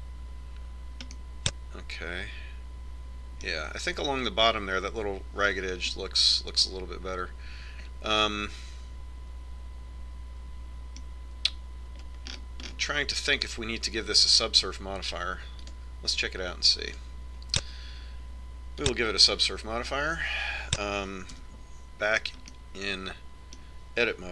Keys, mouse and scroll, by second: 1.4-3.1 drag, 2.9-4.7 middle drag, 7.7-9.8 middle drag, 14.1-16.6 middle drag, 17.5-20.6 drag, 23.3 Tab.